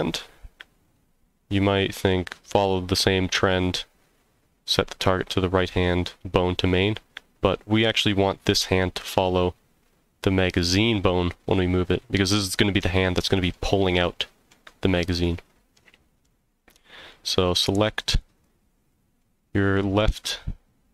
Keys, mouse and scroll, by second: 0.1-2.1 middle drag, 13.0-13.5 middle drag, 14.0-14.5 middle drag, 15.2-16.2 middle drag, 16.8 middle drag, 17.2 scroll down 1, 17.5-17.9 middle drag, 18.3 click, 18.9 middle drag.